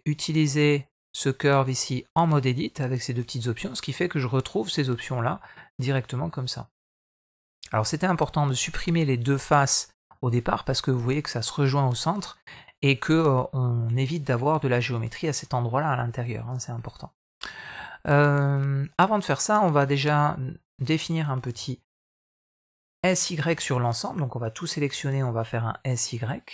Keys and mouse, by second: 1.4 click, 1.8 click, 3.0 Tab, 3.7 middle click, 4.4 shift+middle click, 4.7 middle click, 6.1-7.2 middle drag, 8.2 shift+middle click, 8.7 middle click, 9.7 middle click, 12.1 middle click, 14.7 shift+middle click, 15.0 middle click, 15.8 shift+middle click, 16.2 middle click, 18.7 click, 19.3 click, 20.0 shift+middle click, 20.5 middle click, 21.3 s, 23.3 a, 24.6 s.